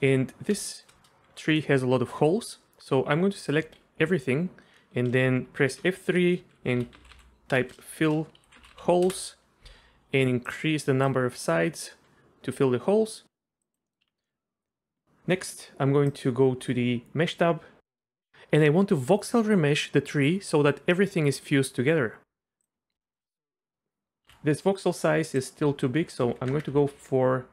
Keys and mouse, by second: 0.6 shift+click, 0.7 shift+middle click, 1.4 middle click, 3.6 a, 5.7 F3, 7.1 l, 11.2 click, 13.7 click, 13.9 click, 14.0 Tab, 14.2 click, 22.6 click, 23.0 shift+click, 24.3 ctrl+z, 25.5-27.5 drag.